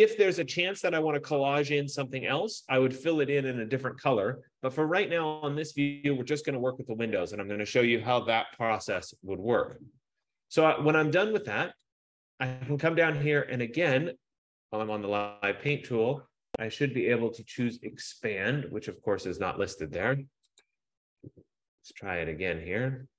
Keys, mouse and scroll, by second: 0.5 F15, 12.2 click, 15.0 click, 20.8 click.